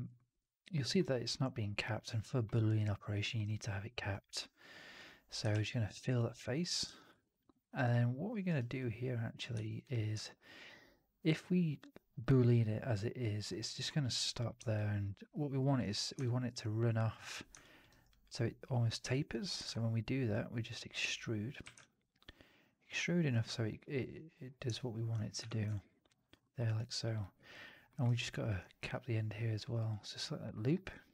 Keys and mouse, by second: 0.1 alt+middle click, 0.3 alt+right click, 0.7 middle click, 0.9 right click, 2.1 alt+middle click, 2.4 alt+right click, 2.9 alt+middle click, 5.5 ctrl+f, 6.1 alt+click, 6.8 f, 7.1 alt+click, 7.4 alt+middle click, 7.4 alt+right click, 7.6 alt+right click, 7.8 alt+click, 8.4 alt+right click, 8.7 click, 9.5 3, 10.1-13.3 alt+drag, 10.3 alt+3, 13.6 middle click, 14.5 alt+middle click, 14.6-15.6 alt+drag, 16.1 alt+click, 17.5 alt+click, 17.8 alt+right click, 18.0 alt+click, 19.0 alt+click, 19.5 ctrl+e, 21.5 w, 22.5 click, 24.6 alt+click, 25.3 4, 25.6-26.2 drag, 26.3 middle drag, 26.5 right drag, 26.8 drag, 27.1 middle click, 27.4 drag, 27.8 middle drag, 27.9 right drag, 28.2 alt+drag, 28.8 2, 29.6 click, 30.9 ctrl+f.